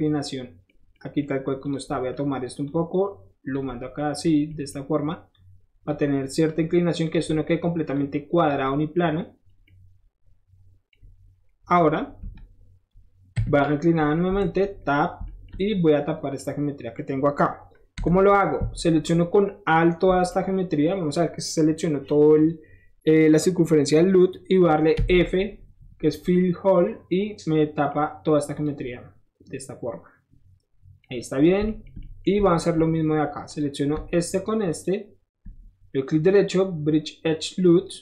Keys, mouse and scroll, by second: 1.6 click, 2.7 click, 4.0 middle click, 4.3 click, 4.4 middle click, 5.3 click, 5.9 middle click, 6.5 middle click, 7.0 click, 7.1 middle click, 7.5 middle click, 7.9 click, 8.5 middle click, 9.5 middle click, 9.5 scroll down 1, 9.6 middle click, 10.9-12.3 middle drag, 12.3 Tab, 14.3 Tab, 15.3-18.1 shift+middle drag, 18.1 2, 18.6 alt+2, 19.7 click, 20.3 middle click, 25.1 f, 25.4-25.8 scroll down 2, 26.4-27.9 middle drag, 28.5 click, 31.0 middle click, 31.5 middle click, 31.9 shift+middle click, 32.2 shift+middle click, 33.5 shift+click, 34.7 shift+click, 35.9 shift+right click, 37.7 click.